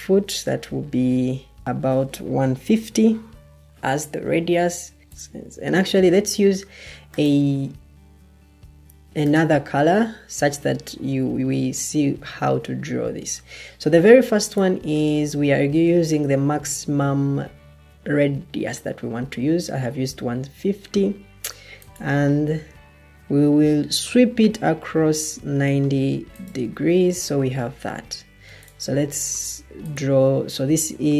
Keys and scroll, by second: 0.4-1.7 typing, 5.0 Delete, 5.6 Escape.